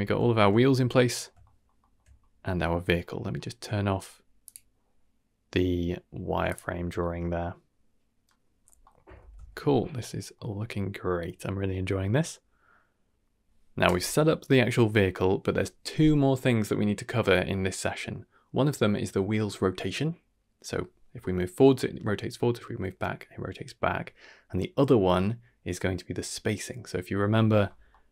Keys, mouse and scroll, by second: 0.2 shift+middle drag, 0.5-1.2 middle drag, 1.4 shift+middle drag, 1.7 shift+middle drag, 2.1-2.4 scroll up 1, 2.4 middle click, 3.3-4.4 scroll down 2, 4.4-6.6 drag, 4.4-4.9 scroll down 1, 7.0-8.2 middle drag, 8.8 middle click, 9.2 ctrl+s, 10.3-11.4 middle drag, 14.9 middle click, 27.9 middle drag.